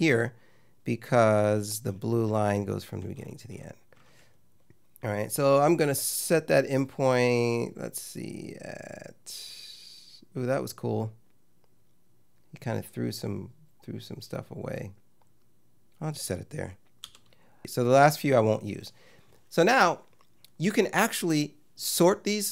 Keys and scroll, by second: 17.1 i.